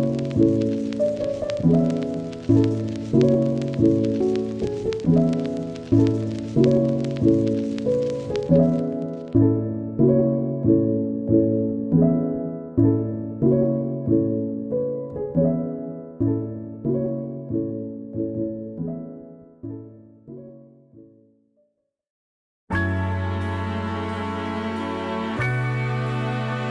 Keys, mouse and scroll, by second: 0.4 scroll up 1, 0.6 Tab, 1.1 alt+click, 1.3 scroll up 1, 1.6 Left, 1.9 scroll down 2, 2.0 scroll up 1, 2.4 alt+Left, 3.2 alt+click, 3.5 click, 3.7 scroll down 4, 3.7 Tab, 4.1 click, 4.2-4.5 scroll up 2, 4.2 middle drag, 5.7 scroll down 2, 5.9 middle click, 6.0 scroll up 2, 6.2-6.9 middle drag, 6.9 scroll down 1, 9.1 middle click, 9.2 scroll up 1, 9.4-10.0 middle drag, 10.0-10.6 scroll down 2, 10.6 click, 10.7 click, 12.8 scroll up 1, 13.1 click, 13.2 click, 13.9 click, 14.1-14.6 scroll up 2, 14.3 shift+middle click, 14.6 middle click, 15.2 scroll up 1, 15.4-17.1 shift+middle drag, 17.1-17.5 scroll down 1, 17.5 shift+middle click, 18.1-18.5 scroll up 2, 18.2 shift+middle click, 18.5 middle click, 19.2 click, 19.3 scroll up 1, 19.6 middle click, 19.7 f, 20.2 click, 20.7 scroll down 2, 20.8 middle click, 21.4 click, 21.9 shift+middle click, 22.1 click, 22.3 scroll down 1, 22.4-23.6 shift+middle drag, 23.6 scroll up 1, 23.8 click, 24.1 middle click, 24.7 click, 25.2 shift+middle click, 25.6 scroll up 1, 25.9 click, 26.4 scroll down 2, 26.5 shift+middle click, 26.6 scroll up 1.